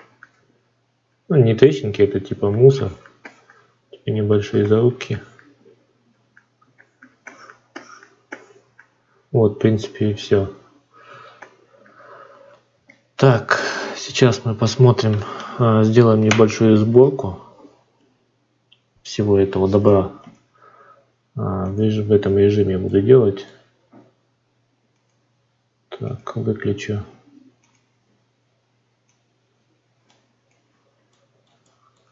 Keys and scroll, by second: 1.3 ctrl+z.